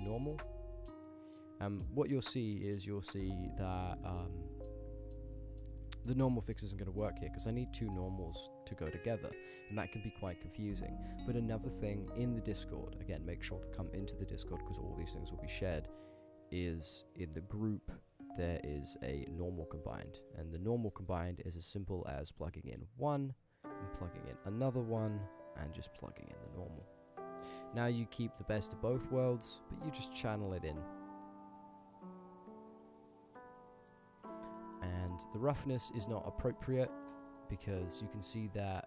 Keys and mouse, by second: 0.2 middle click, 0.8-2.8 drag, 4.0 click, 4.9 click, 5.9 click, 6.4 middle click, 7.9-9.0 drag, 9.5 middle click, 10.2 click, 10.5 x, 10.9 shift+a, 22.2-23.3 drag, 24.2-25.2 drag, 25.9-26.5 drag, 27.6-29.0 middle drag, 30.1-33.3 alt+shift+drag, 33.7 middle drag, 34.4 ctrl+click, 34.5 ctrl+middle click, 34.8 click, 35.1 ctrl+click, 35.4 click, 35.4 middle drag, 35.7 ctrl+middle click, 35.8 ctrl+click, 36.2 ctrl+click, 36.3 ctrl+middle click, 36.5-36.8 middle drag, 37.2 ctrl+middle click, 37.4 middle drag, 38.0 middle drag, 38.5-38.8 middle drag.